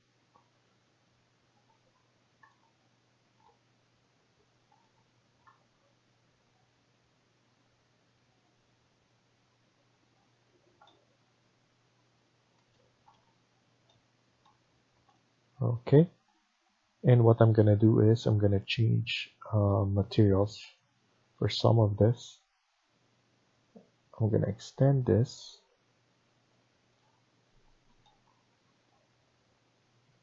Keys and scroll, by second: 1.9 Escape, 10.3 Escape.